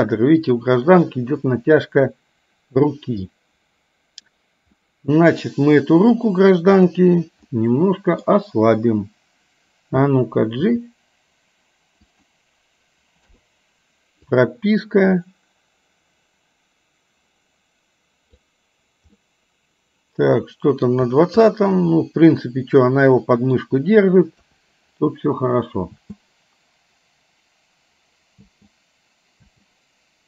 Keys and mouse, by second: 4.8 middle click, 7.6 middle click, 10.7 g, 13.3 i, 14.5-18.5 drag, 19.2-21.0 middle drag, 21.6-23.6 middle drag, 24.3 KP_1, 26.1 space, 28.5 space, 29.6 space.